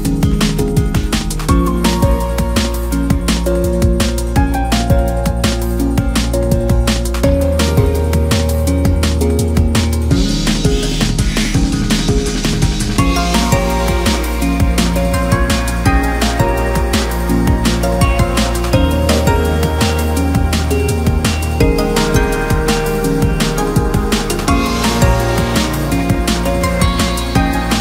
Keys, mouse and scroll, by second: 1.5 click, 2.7 1, 3.1 click, 3.8 click, 5.0 click, 5.7 click, 7.0-7.6 scroll down 2, 7.6 KP_1, 8.2-8.6 scroll down 2, 8.6 shift+middle click, 9.5-10.9 scroll up 1, 10.9-13.7 drag, 13.7-14.3 scroll down 5, 14.7 click, 16.5-17.4 scroll up 4, 17.4 s, 18.3 s, 19.0 s, 19.8-20.9 scroll up 3, 20.9 r, 23.2 s, 24.8 click, 26.2 shift+middle click, 26.9-27.7 scroll up 4, 27.7 s.